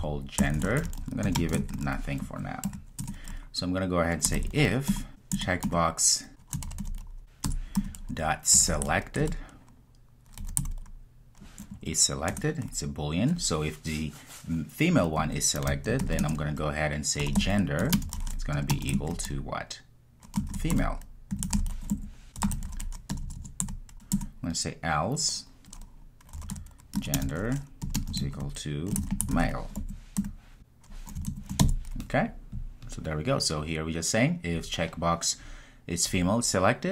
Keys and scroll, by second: 5.0 Return, 5.4 Return, 12.4 Return, 17.8 Return, 24.2 Return.